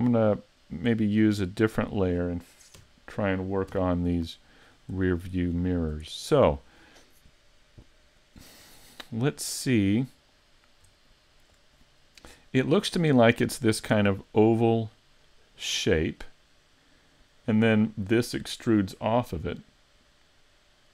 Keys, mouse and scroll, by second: 0.4 middle click, 1.8 click, 2.8 KP_3, 3.7 KP_5, 4.6-5.1 scroll up 5, 5.2 shift+middle click, 5.7 scroll up 2, 6.1 shift+middle click, 10.6-11.0 scroll up 1, 11.0 shift+middle click.